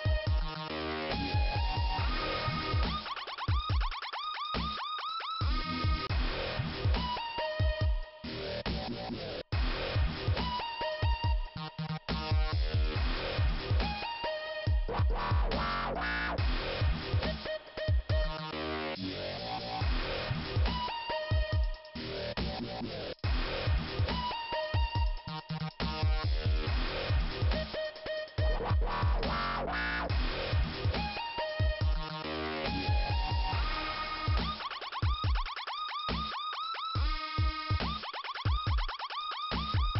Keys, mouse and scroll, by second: 2.1 click, 7.5 click, 9.1 click, 11.5 click, 13.9 middle click, 15.0 click, 17.1 click, 17.2 click, 19.8 middle click, 20.9 middle click, 22.8 click, 24.9 click, 26.9 middle click, 27.8 click, 27.8 ,, 30.4 click, 30.5 click, 33.5 click, 34.3 Delete, 36.7 click, 37.8 click, 39.7 click.